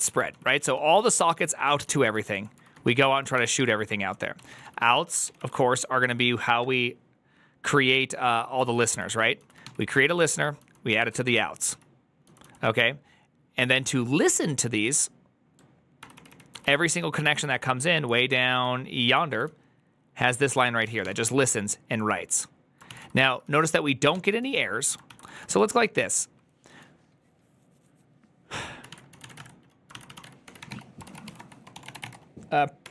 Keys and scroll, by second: 0.0-5.3 typing, 6.4-12.3 typing, 15.2 typing, 15.9 ctrl+d, 16.0 ctrl+d, 16.2 ctrl+d, 16.4 ctrl+d, 16.6 ctrl+d, 17.0 ctrl+d, 18.1 ctrl+d, 19.2 ctrl+d, 19.2-25.3 typing, 22.8 ctrl+c, 24.9 ctrl+c, 29.7-32.9 typing, 32.7 Tab.